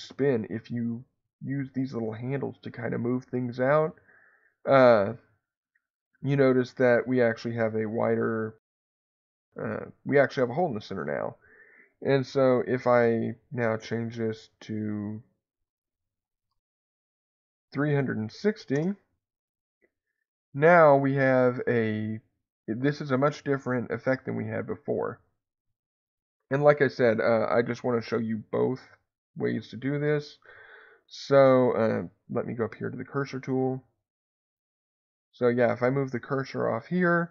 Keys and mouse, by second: 11.0-13.8 drag, 14.6-19.6 drag, 21.1-25.1 middle drag, 27.0 ctrl+z, 32.7 click, 34.7 click.